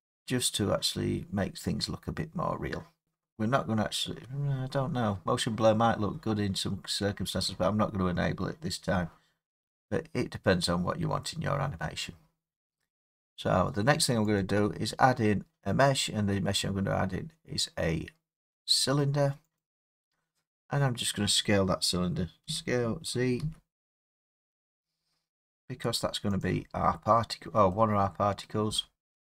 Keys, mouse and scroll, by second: 3.0 middle click, 8.5 middle click, 8.6 middle click, 9.5 middle click, 10.2 middle click, 11.8 middle click, 14.4 click, 19.6 click, 20.5 middle click, 22.5 s, 23.4 z, 26.4 click, 28.5 middle click.